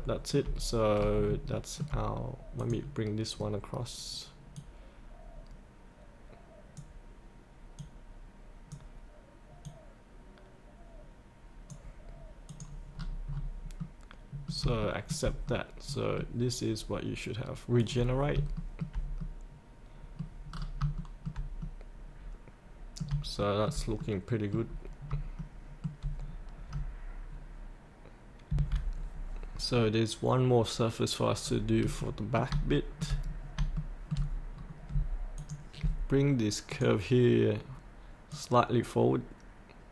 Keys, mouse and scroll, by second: 0.4 scroll up 1, 1.5 shift+middle click, 2.6 click, 3.3-4.5 scroll down 1, 4.5-12.3 drag, 12.9 scroll up 1, 13.8 middle click, 14.8 shift+middle click, 15.4 middle click, 17.8 click, 18.5 shift+middle click, 19.3 middle click, 20.5 scroll down 1, 20.9 shift+middle click, 21.6 middle click, 23.4 shift+middle click, 24.0 middle click, 24.6-25.0 scroll down 1, 25.4 shift+middle click, 25.6 shift+middle click, 26.2-28.5 scroll down 1, 28.5 F8, 29.7 scroll down 1, 31.4 scroll up 1, 32.0 middle click, 32.7 shift+middle click, 33.2 scroll down 1, 33.8 shift+middle click, 34.5 scroll down 1, 35.3-39.9 drag.